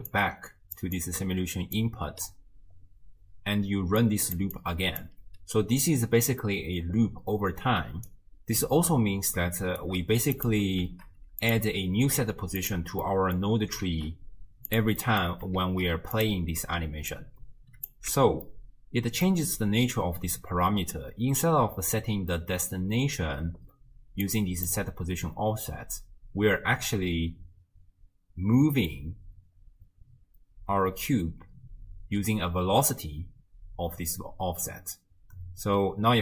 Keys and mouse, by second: 0.1 click, 1.0 click, 3.6-5.2 typing, 4.0 click, 4.6 click, 7.8 d, 8.1-9.9 drag, 9.8 d, 9.9 d, 10.4 click, 10.8 d, 12.1 shift+d, 13.0 middle drag, 13.2 click, 13.3 middle click, 13.9 shift+d, 15.0 click, 15.2 middle click, 15.6 shift+d, 17.1 click, 18.1 x, 18.5 click, 18.5 middle click, 18.7 click, 24.3 click, 24.4 click, 36.1 space.